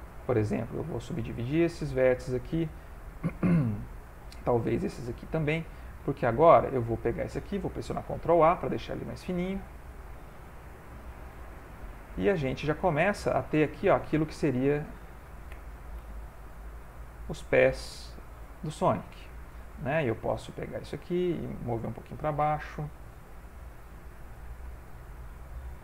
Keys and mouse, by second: 0.0 shift+click, 0.5 right click, 1.8 click, 3.9 shift+click, 4.7 right click, 6.1 click, 6.8 shift+click, 7.9 ctrl+a, 9.7 g, 12.2 middle click, 14.2 a, 15.5 g, 17.6 middle click, 19.1 shift+middle click, 19.4 middle click, 20.5 click, 22.4 g, 24.8 shift+middle click, 25.1 middle click.